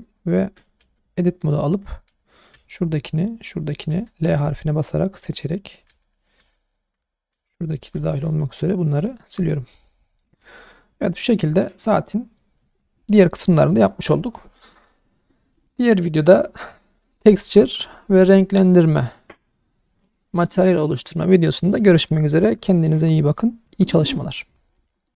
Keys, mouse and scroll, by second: 0.4 Tab, 0.8 3, 1.4 click, 2.5 l, 3.4 l, 3.9 l, 5.1-8.3 typing, 9.3 Tab, 10.1 click, 10.4 scroll down 2, 10.7-12.3 middle drag.